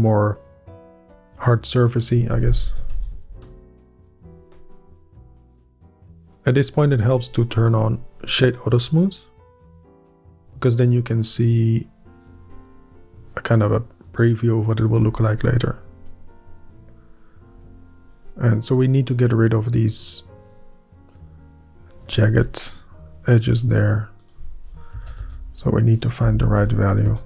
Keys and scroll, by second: 2.8 ., 2.9 0, 3.2 1, 3.4 Return, 4.0 Up, 24.9 Up, 25.2 Up, 25.4 5, 25.9 Up, 26.6 ., 27.0 Up.